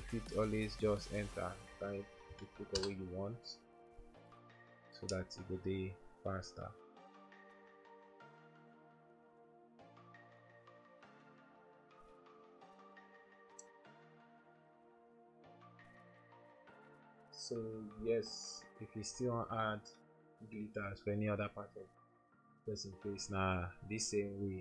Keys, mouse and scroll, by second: 2.4 3, 2.8 Return, 11.3 double click, 18.9 ctrl+-, 19.6 ctrl+-.